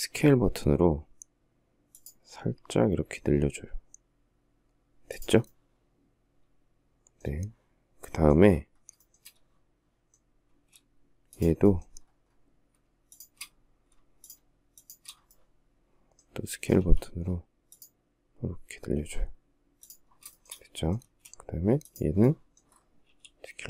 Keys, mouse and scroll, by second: 8.2 shift+middle click, 9.7 space, 12.3 shift+click, 13.4 shift+click, 14.0 shift+click, 16.0 s, 19.6 shift+middle click, 20.3 space, 22.3 s.